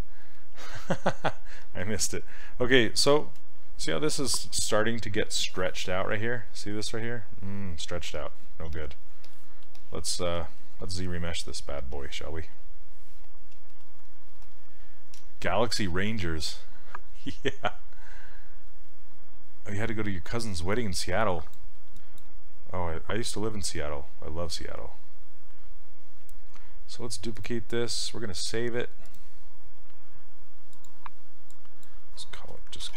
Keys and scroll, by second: 3.2 shift+f, 4.2 shift+f, 8.7 s, 32.6-32.9 typing.